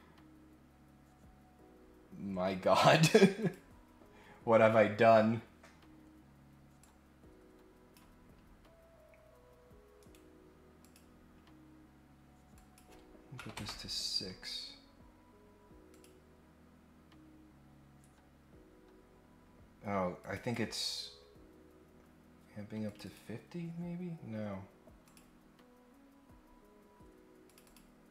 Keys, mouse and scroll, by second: 3.3 click, 6.8-7.9 drag, 8.6-9.4 scroll up 2, 10.0 right click, 10.8 click, 12.5 click, 15.9 click, 17.2-17.8 scroll up 2, 20.2 click, 22.9 click, 23.0 click, 25.0 click, 26.4 scroll up 1, 27.4 click, 27.6 click.